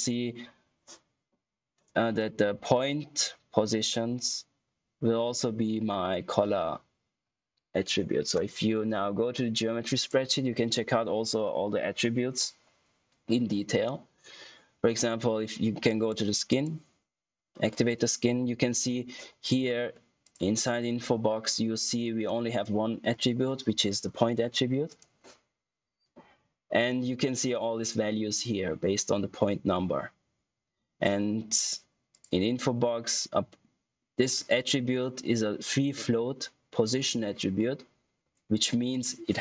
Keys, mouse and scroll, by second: 9.9 click, 15.8 click, 20.1 click, 24.8 click, 32.0 click.